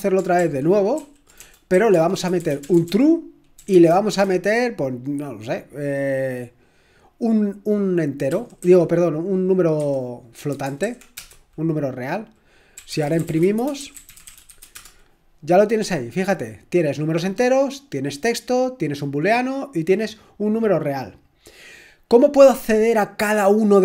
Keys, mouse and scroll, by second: 0.4 ctrl+p, 1.0 ctrl+p, 1.4-3.7 typing, 8.4 typing, 9.5-11.1 typing, 12.5-15.0 typing.